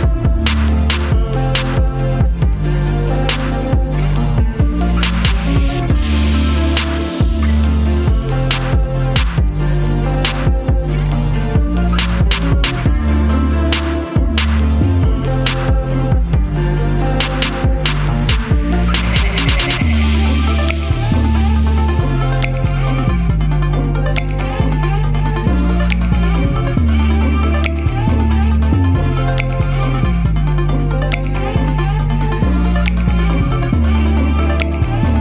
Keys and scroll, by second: 27.0 space, 30.1 space, 34.8 typing.